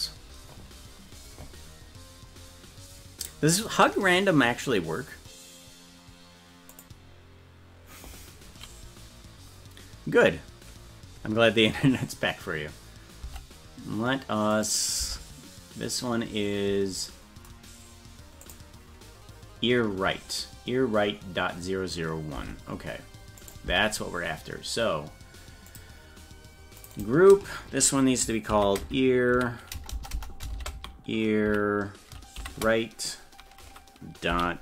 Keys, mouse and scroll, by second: 14.6 right click, 15.0 Tab, 18.4 click, 22.4 Tab, 23.4 right click, 23.7 Tab, 25.7 click, 26.8 click, 26.9-34.6 drag, 29.9 BackSpace.